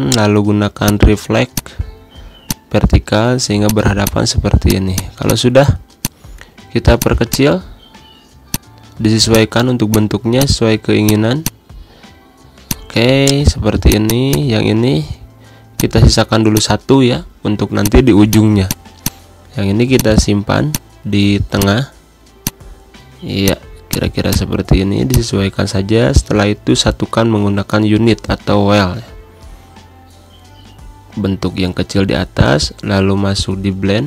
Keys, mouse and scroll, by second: 0.7 shift+click, 3.0 shift+click, 3.9 click, 4.1 click, 4.5 click, 5.1 shift+click, 5.8 click, 6.0 click, 6.8 click, 7.3 click, 7.5-8.8 shift+drag.